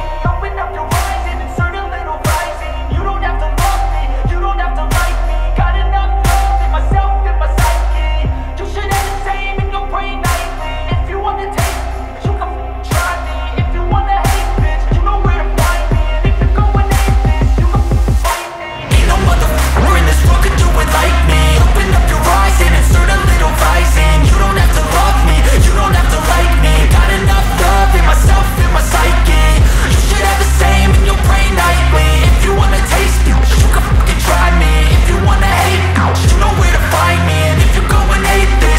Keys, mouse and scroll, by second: 2.3 scroll down 1, 3.6-4.3 scroll up 1, 4.3-6.0 scroll down 1, 7.4 click, 11.3-18.2 drag, 19.2 g, 20.0-27.6 drag.